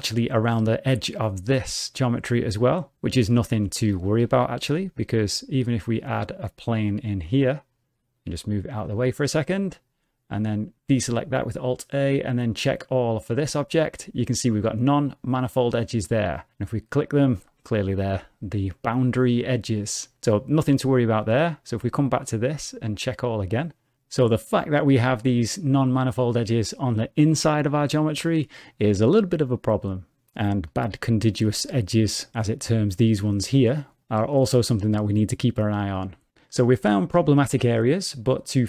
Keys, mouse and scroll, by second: 3.6 Tab, 3.8-4.2 scroll down 1, 4.3 shift+a, 8.3 g, 9.9 Tab, 10.9 alt+a, 12.5 click, 17.0 click, 19.1 Tab, 20.6 x, 21.4 click, 21.8 Tab, 22.9 click, 31.2 click.